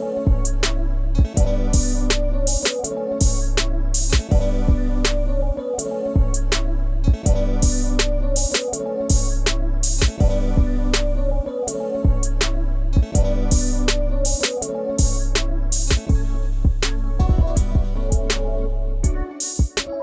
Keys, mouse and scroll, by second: 1.5 double click, 2.9-3.8 scroll up 1, 6.8-7.1 scroll down 1, 8.6-9.1 scroll up 1, 11.4 scroll down 1, 16.5 double click.